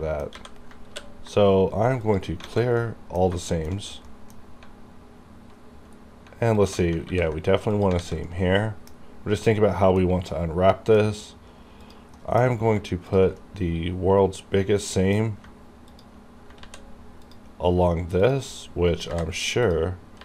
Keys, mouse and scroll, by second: 0.0 middle click, 0.4 a, 0.9 ctrl+e, 2.0 click, 2.5 alt+a, 2.9 middle click, 3.5 shift+middle click, 4.1 middle click, 5.8 scroll down 1, 6.6 alt+click, 6.6 alt+click, 7.1 ctrl+e, 7.8 click, 8.1 alt+a, 8.3-9.7 middle drag, 9.8 scroll down 1, 10.1 scroll up 1, 10.4 middle click, 11.1 scroll down 1, 11.9 click, 12.2 middle click, 12.2 middle click, 13.2 ctrl+click, 13.4 scroll down 1, 13.8-16.0 middle drag, 15.9 ctrl+click, 16.0 ctrl+click, 16.7 ctrl+z, 17.3 ctrl+click, 17.3 ctrl+click, 19.0 ctrl+z, 19.7 ctrl+click, 19.7 ctrl+click.